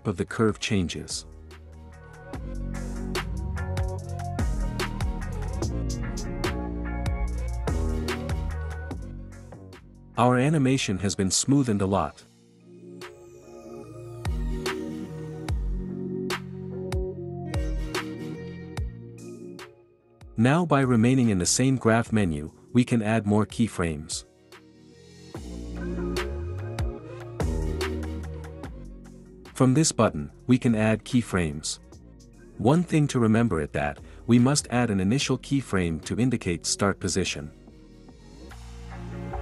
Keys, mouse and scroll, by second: 0.8-1.8 drag, 2.7-3.7 drag, 5.5 click, 6.6 click, 8.3-9.3 drag, 11.8-12.8 drag, 13.9 click, 15.2-16.2 drag, 16.5 space, 17.8 space, 19.7 space, 21.0 space, 23.9 click, 29.9-30.9 drag, 33.2 space, 37.2 space, 39.3 click.